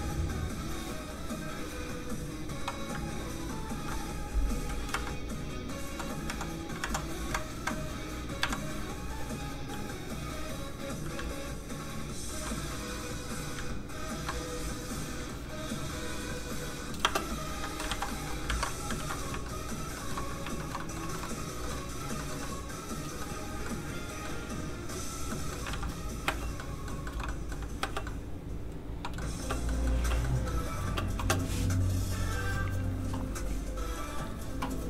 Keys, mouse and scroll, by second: 3.0 ctrl+click, 3.7 ctrl+z, 4.9 z, 5.0 Up, 5.8 Down, 7.2 Up, 10.0 click, 11.2 ctrl+click, 12.6 click, 12.7 click, 13.6 ctrl+click, 14.9 click, 15.0 click, 17.0 space, 17.9 ctrl+alt+shift+z, 18.3 middle click, 18.5 ctrl+Tab, 18.9 ctrl+s, 19.4 shift+middle click, 20.8 middle click, 20.9 middle click, 21.1 shift+middle click, 21.7 shift+middle click, 22.4 alt+middle click, 25.6 alt+middle click, 25.7 alt+shift+z, 26.2 space, 26.9 middle click, 27.0 shift+middle click, 27.3 middle click, 27.4 middle click, 27.8 space, 28.0 middle click, 29.3 space, 29.5 scroll down 1, 29.7 middle click, 30.0 space, 30.2 middle click, 30.8 space.